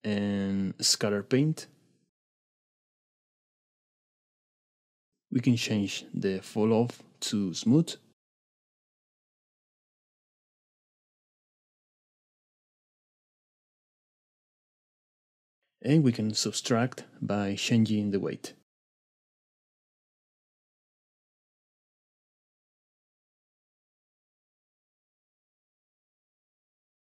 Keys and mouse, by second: 2.3-3.6 drag, 5.9-6.9 drag, 7.3-10.7 drag, 14.8 middle click, 16.3-17.5 drag, 17.8-22.1 drag, 25.3 middle click.